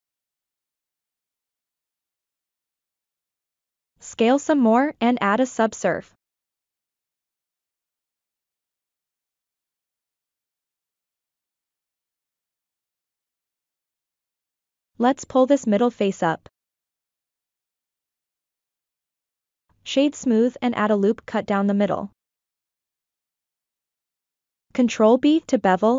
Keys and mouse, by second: 1.7 ctrl+click, 2.2 shift+click, 3.0 click, 3.6 click, 4.7 click, 5.6 click, 6.3 Tab, 7.3 ctrl+2, 9.1 Tab, 10.0-10.4 drag, 10.9-12.2 drag, 13.5 middle click, 14.3 3, 14.8 middle click, 16.1 g, 16.6-18.2 drag, 18.5-19.1 middle drag, 19.2 Tab, 19.6 right click, 21.0-21.4 shift+middle drag, 23.1 ctrl+r, 25.2 ctrl+b.